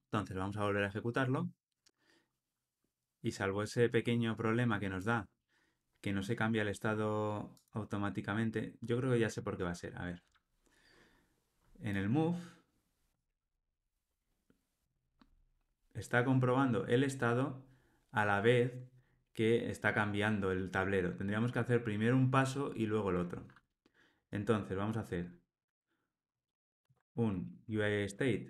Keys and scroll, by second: 0.7 ctrl+r, 26.9 super+x.